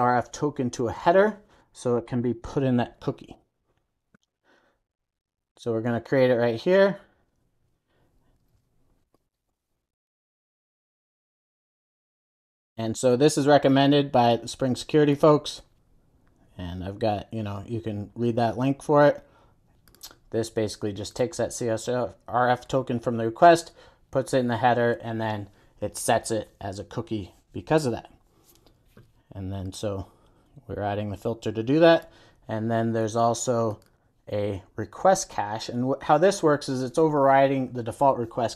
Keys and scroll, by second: 11.5 Return, 12.2 super+s.